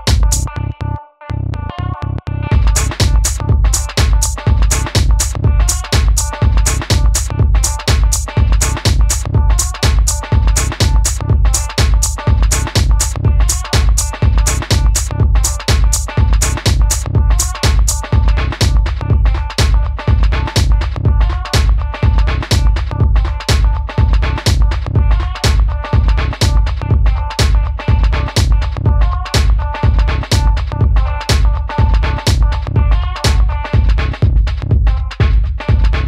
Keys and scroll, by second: 5.2-7.8 typing, 8.9 super+c, 9.0 super+v, 11.0 d, 18.3 super+z.